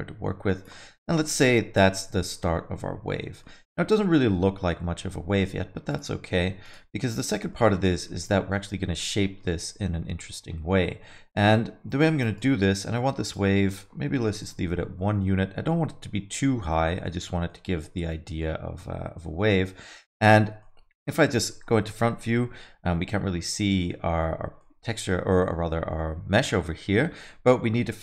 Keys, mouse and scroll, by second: 0.9 middle click, 1.2 alt+middle click, 3.4 middle click, 4.1 alt+middle click, 5.9 click, 6.6 click, 7.5 middle click, 8.5 middle click, 11.3 click, 12.3 click, 13.6 click, 15.2 alt+middle click, 17.5 alt+middle click, 19.3 KP_1, 20.6 alt+middle click, 22.0 KP_1, 24.6 middle click, 25.0 scroll up 3, 25.2 middle click, 27.2 alt+middle click.